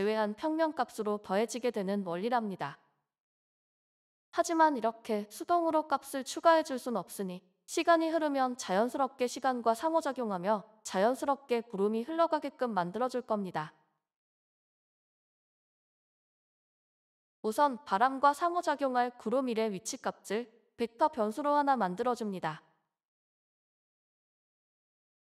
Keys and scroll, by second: 0.8-1.5 typing.